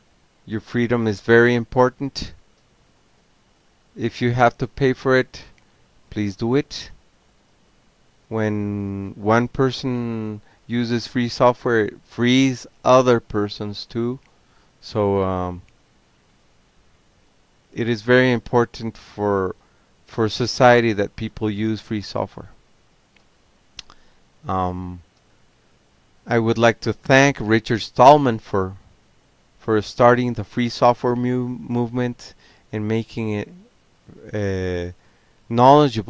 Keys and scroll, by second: 0.0-10.0 typing, 11.3 Return, 11.8-14.7 typing, 15.9 alt+q, 17.0 ctrl+c, 18.6 ctrl+g, 19.9 ctrl+p, 21.1 ctrl+c, 21.4 ctrl+p, 23.0 Return, 26.3 Return, 26.5 Return, 27.5 BackSpace, 27.8 BackSpace.